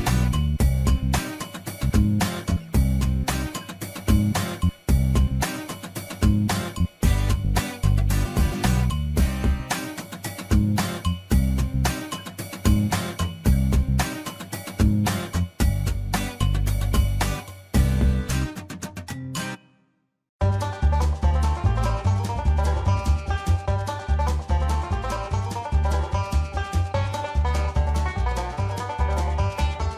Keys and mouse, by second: 1.5 click, 2.1-3.4 drag, 4.2 shift+middle click, 5.0 ctrl+s, 5.9 shift+middle click, 8.4 shift+middle click, 10.6 shift+middle click, 12.1 shift+middle click, 13.0 shift+middle click, 14.5 ctrl+right click, 15.4 shift+middle click, 16.8 shift+middle click, 19.1 ctrl+r, 23.1 shift+middle click, 24.3 shift+middle click, 25.6-27.2 drag, 27.6 shift+middle click, 29.6 click.